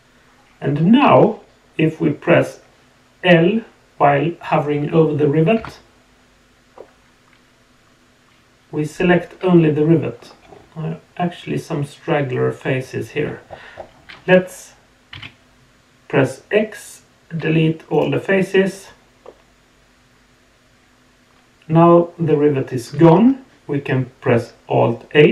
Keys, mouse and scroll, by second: 6.7-10.2 middle drag, 19.2-22.9 middle drag.